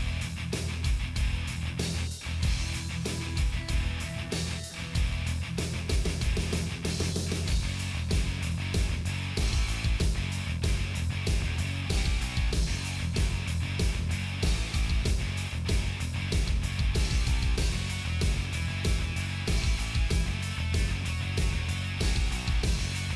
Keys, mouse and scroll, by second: 0.4 click, 0.5 middle click, 1.2 click, 1.9 Tab, 2.2 click, 3.0 l, 3.1 click, 3.3 KP_7, 4.5 click, 4.6 l, 4.9 middle click, 5.3 Delete, 5.7 middle click, 6.5 Delete, 7.2 l, 7.8 click, 8.6 Delete, 9.4 middle click, 9.6 ctrl+z, 10.0 KP_7, 10.3 shift+middle click, 10.4 shift+scroll up 3, 10.5 shift+middle click, 10.8 shift+middle click, 11.2 g, 12.6 scroll down 1, 12.7 middle click, 13.2 middle click, 13.4 scroll down 1, 13.5-15.8 shift+middle drag, 15.8-17.5 drag, 17.5 Delete, 18.1 middle click, 18.7 scroll up 1, 18.8 middle click, 19.2 click, 19.5 middle click, 19.8 shift+click, 20.0 Delete, 20.5 Delete, 20.9 middle click, 21.3 shift+click, 21.7 f, 22.2 middle click, 22.9 middle click, 23.1 scroll down 2.